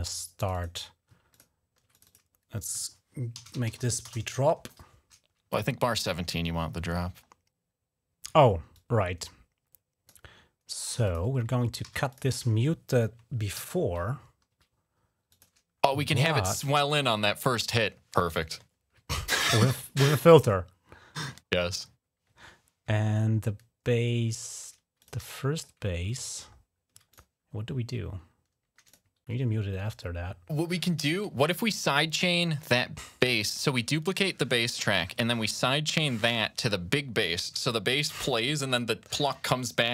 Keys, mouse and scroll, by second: 0.1 click, 0.3 click, 1.1 ctrl+click, 1.7 click, 2.9-4.0 typing, 5.6-5.9 ctrl+scroll down 2, 8.5-9.9 drag, 10.8 click, 11.0-11.6 typing, 11.9 click, 13.1-13.9 typing, 15.1 click, 17.8-18.4 ctrl+scroll down 1, 18.8 ctrl+scroll up 1, 22.2 ctrl+scroll down 1, 24.8 click, 25.0 s, 25.3 click, 25.5 ctrl+click, 25.7 ctrl+scroll down 1, 26.3-26.6 ctrl+scroll up 1, 26.9 ctrl+click, 28.6 click, 29.1 alt+1, 30.6 ctrl+scroll up 1, 31.8 ctrl+scroll down 1.